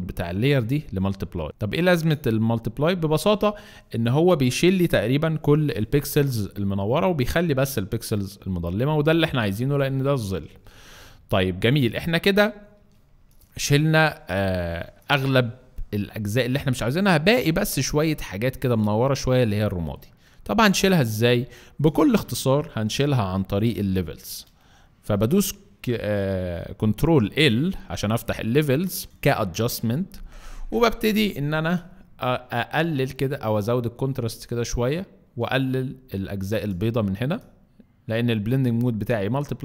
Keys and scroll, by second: 14.7 alt+space, 15.8 alt+space, 17.5 alt+space, 21.2 alt+space, 21.9 alt+space, 22.4 alt+c, 27.2 ctrl+alt+l.